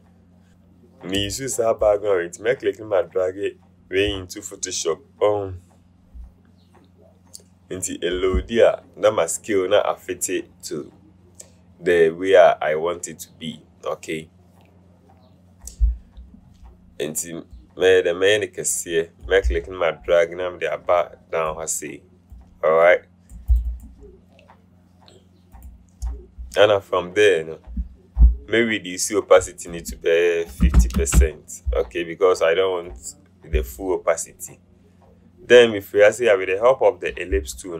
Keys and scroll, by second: 30.8 KP_5, 31.2 Return.